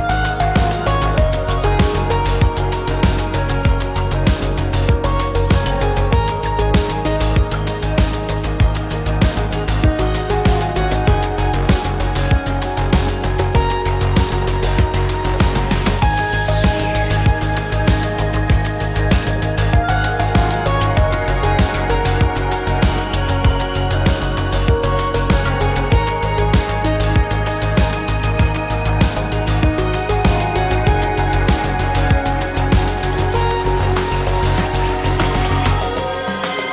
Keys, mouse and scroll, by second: 29.2 ctrl+a, 33.9 Delete.